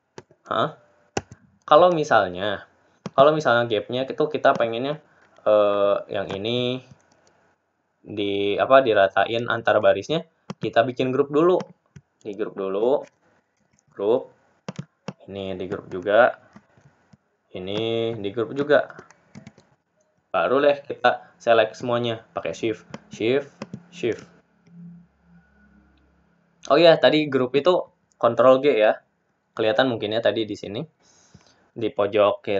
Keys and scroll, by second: 6.6 ctrl+z, 18.5 ctrl+g.